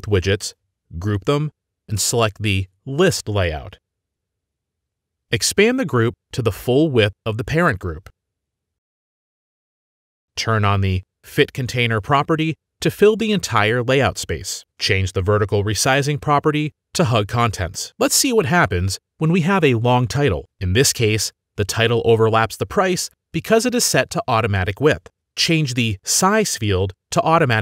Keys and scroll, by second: 0.9 ctrl+g, 7.9-10.5 typing, 15.4-16.3 typing, 19.4-22.7 typing, 24.1 ctrl+x.